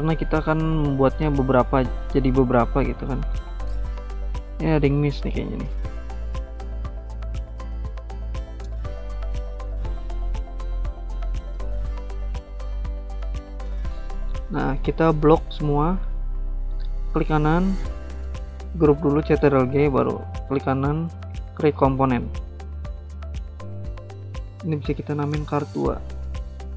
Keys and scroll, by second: 2.7 ctrl+g, 3.3 ctrl+z, 18.6 ctrl+g, 24.5-25.7 typing.